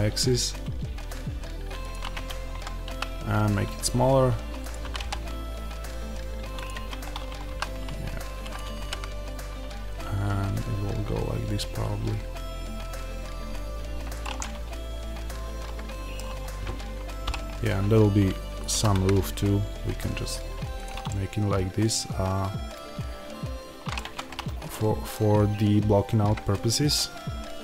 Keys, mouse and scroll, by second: 1.8 click, 2.0 Tab, 2.7 s, 4.6 click, 4.7 g, 6.5 click, 6.6 Tab, 7.4 s, 14.1 click, 14.3-14.8 scroll up 1, 17.1-20.7 middle drag, 17.1 e, 20.7 click, 20.9-23.9 middle drag, 23.9 Tab, 24.6 middle click.